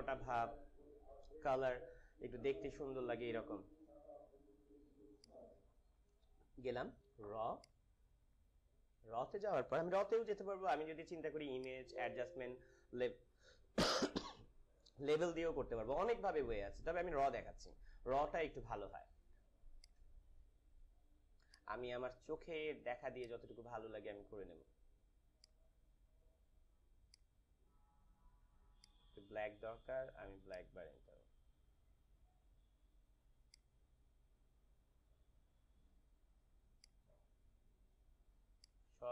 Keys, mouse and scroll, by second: 5.1 click, 7.5 click, 11.5 click, 19.7-39.1 drag.